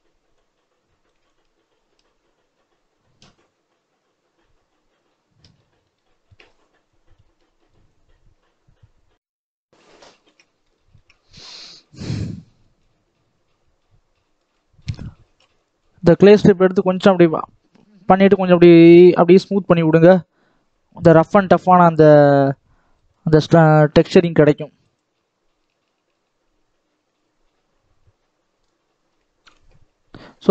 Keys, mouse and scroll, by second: 0.3-4.2 drag, 5.5 middle click, 6.3-6.7 scroll up 2, 6.7-9.9 drag, 9.9-10.9 shift+middle drag, 10.9-11.2 scroll up 3, 11.2 middle click, 11.5 scroll down 2, 11.7 shift+middle click, 12.2-14.4 drag, 14.4 middle click, 14.9-19.9 shift+drag, 21.3 middle click, 21.8 scroll down 1, 22.1-22.6 scroll up 1, 22.6-27.9 drag, 28.5-30.5 shift+drag.